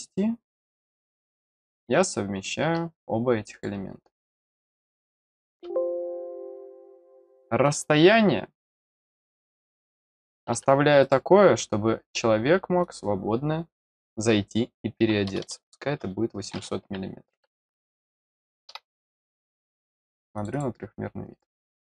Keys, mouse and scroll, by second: 1.0 click, 1.7 scroll down 1, 3.5 click, 4.3 click, 7.6 click, 8.6 click, 9.4 click, 10.0 click, 11.0 click, 12.8 click, 17.8 click, 20.3 click, 20.5 click, 21.6-21.8 middle drag.